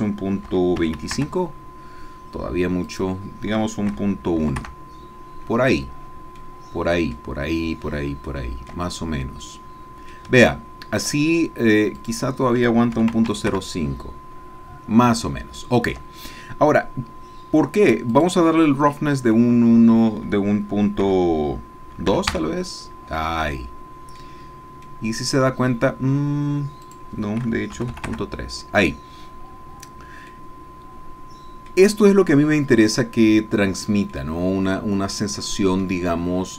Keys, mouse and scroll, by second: 0.5 KP_Decimal, 0.8 KP_2, 1.0 KP_5, 1.2 KP_Enter, 2.9 click, 3.9 KP_Decimal, 4.6 KP_Enter, 5.9-6.4 scroll down 1, 6.4 middle click, 8.3-10.3 shift+middle drag, 10.5 shift+middle click, 12.0 click, 13.0 KP_Decimal, 13.1 KP_0, 13.3 KP_5, 13.5 KP_Enter, 15.3 shift+click, 18.1 click, 21.0 KP_Decimal, 22.1 KP_2, 22.3 KP_Enter, 23.6 middle click, 24.4-24.8 scroll down 1, 24.8 middle click, 26.8 click, 27.7 KP_Decimal, 27.9 KP_3, 28.1 KP_Enter, 30.4-31.9 drag, 32.6-36.0 drag, 36.2-36.5 scroll up 2.